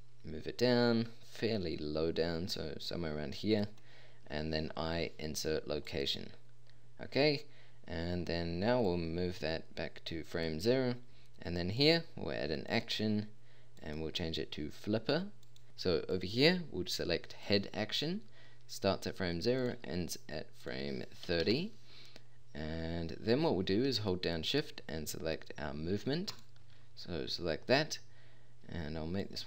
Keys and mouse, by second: 4.8 i.